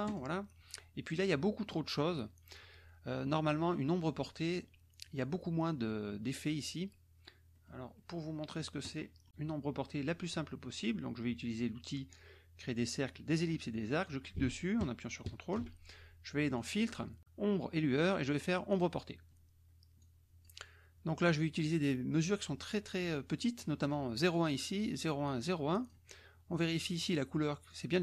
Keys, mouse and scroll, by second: 0.0 click, 7.8 middle click, 7.9 middle click, 9.0 click, 14.1-15.7 ctrl+drag, 16.6 click, 18.8 click, 20.0 click, 23.9-26.2 drag, 26.5-27.2 drag, 27.7-28.0 drag.